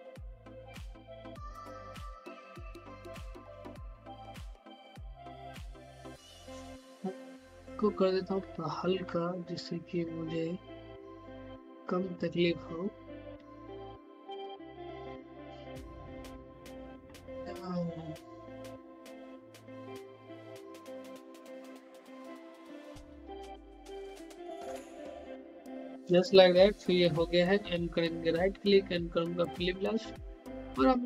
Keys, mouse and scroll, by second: 0.4 click, 1.2-5.7 typing, 7.2-8.8 drag, 8.8-9.4 typing, 10.5-11.0 typing, 12.1-14.2 typing, 15.2 click, 16.2-16.8 typing, 17.7 click, 18.9-20.7 typing, 21.7 typing, 22.8 click, 23.4-24.1 typing, 28.1 right click.